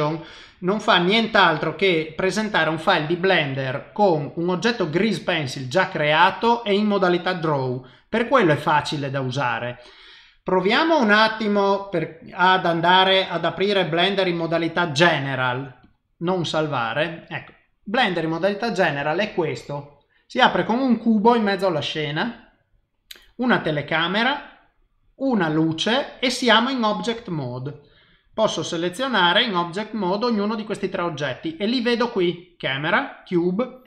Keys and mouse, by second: 8.3 click, 10.5 click.